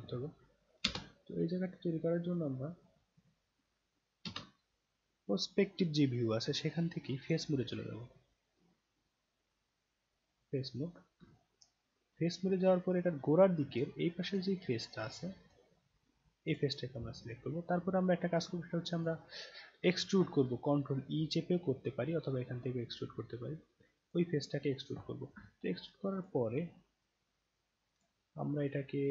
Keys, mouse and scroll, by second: 0.8 space, 2.3 click, 4.2 space, 5.3 scroll up 1, 6.6-7.3 alt+drag, 7.4-10.2 right drag, 10.7 scroll down 2, 11.3-13.7 alt+drag, 13.9 alt+right click, 14.6 alt+middle click, 15.1 alt+right click, 16.5 click, 18.9 click, 24.0 click, 25.4-26.2 alt+drag, 26.5-28.0 alt+drag.